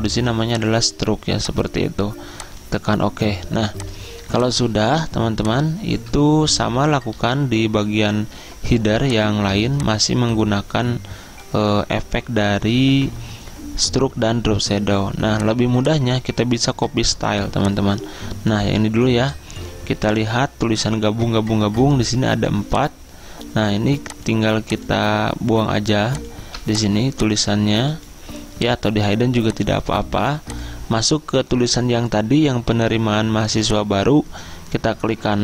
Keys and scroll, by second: 7.2 z, 8.4 Return, 9.6 z.